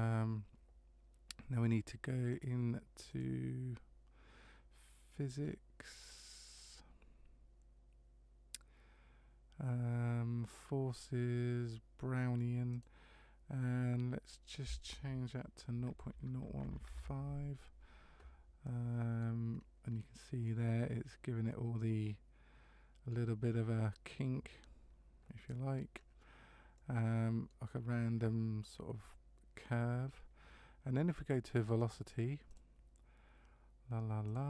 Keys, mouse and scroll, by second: 2.3 click, 3.1 click, 5.4-6.1 scroll down 3, 12.7 click, 18.6 middle click, 19.6-20.4 scroll up 2, 20.4 middle click, 20.4 scroll up 1, 25.9-26.7 scroll down 1, 26.7 middle click, 26.7 scroll down 1, 31.8 click, 32.5 click, 34.3 click.